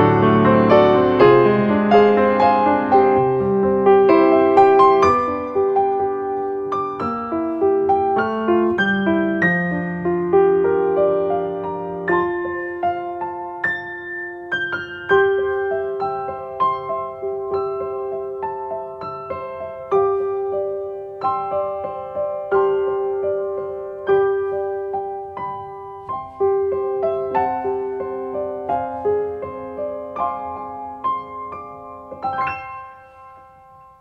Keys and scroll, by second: 4.1 space.